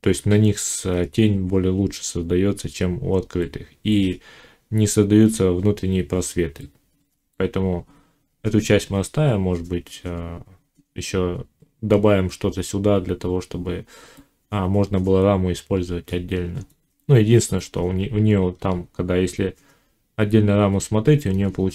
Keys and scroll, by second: 18.4 ctrl+r.